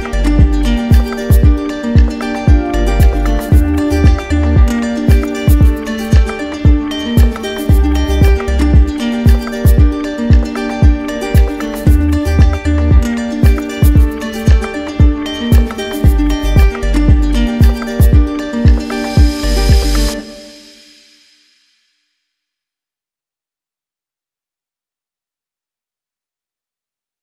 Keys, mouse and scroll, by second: 0.1 shift+click, 0.7 shift+click, 1.7 shift+click, 2.3 click, 3.1 click, 5.2 click, 7.1 click, 8.7 click, 10.2 alt+click, 10.9 click, 11.3 shift+click, 15.0 click, 16.2 click, 17.1 alt+click, 18.1 alt+click, 19.5 alt+click, 20.1 click, 23.2 click, 24.4 click, 25.3 click, 26.4 click.